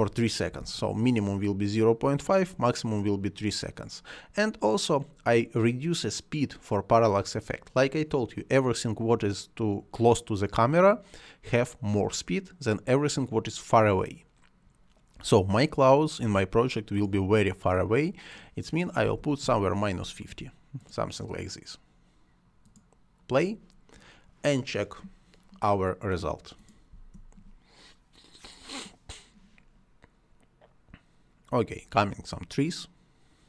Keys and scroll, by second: 0.5 3, 0.6 Return, 18.8-19.6 typing, 26.9 space.